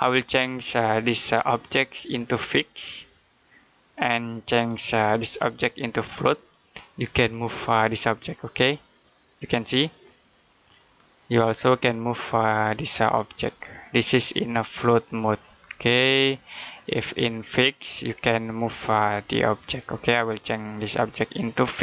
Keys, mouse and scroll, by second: 0.9 right click, 3.2 click, 4.5 right click, 6.0 click, 20.6 right click.